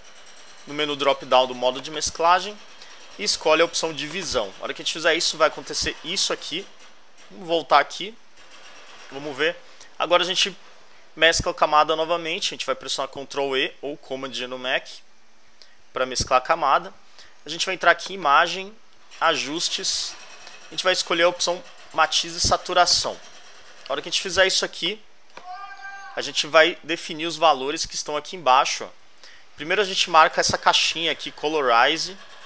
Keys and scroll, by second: 7.0 alt+Left, 10.9 alt+Right, 14.8 super+e, 25.9 alt+Left.